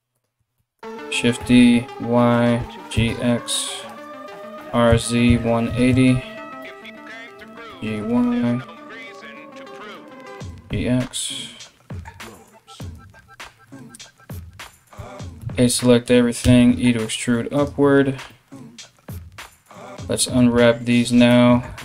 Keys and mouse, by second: 0.2 shift+d, 2.2 g, 4.2 r, 7.0 g, 10.0 g, 15.0 a, 16.0 e, 19.0 3, 19.3 right click, 19.5-20.6 middle drag, 20.6 shift+right click, 20.8-21.8 shift+middle drag.